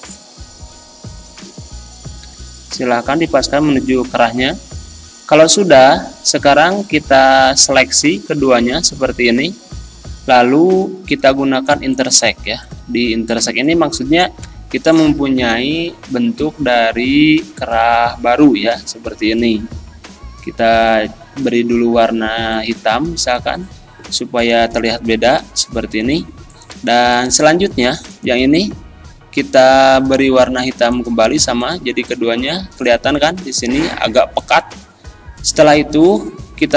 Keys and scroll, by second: 7.3 ctrl+z, 9.5 ctrl+z, 14.4 Delete, 17.7 ctrl+z, 25.8 ctrl+z.